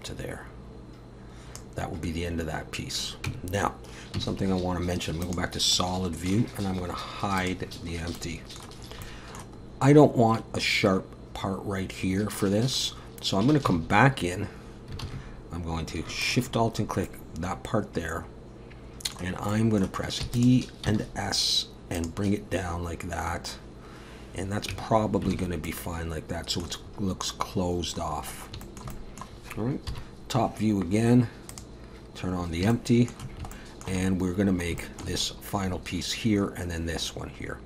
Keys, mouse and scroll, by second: 3.3 Tab, 4.2 z, 5.8 middle click, 7.5 click, 7.9 scroll up 2, 8.2 middle click, 8.8 scroll up 2, 9.0 middle click, 9.6-10.4 scroll up 3, 12.3 middle click, 13.7 Tab, 15.0 alt+a, 16.2 alt+shift+click, 16.7 scroll down 2, 17.0 middle click, 19.5 middle click, 20.2 e, 20.8 s, 23.4 scroll down 1, 24.7 Tab, 25.0-25.3 scroll down 3, 25.3 alt+a, 25.7 middle click, 26.8-27.5 scroll up 2, 27.5 scroll up 3, 27.9-28.6 scroll down 5, 28.6 shift+middle click, 28.9 middle click, 29.9 KP_7, 31.5 click, 32.4-32.7 scroll up 2, 32.7 shift+middle click, 33.5 shift+middle click, 34.0-34.7 scroll down 6, 34.8 shift+middle click, 35.2 scroll up 2, 37.4 scroll up 2.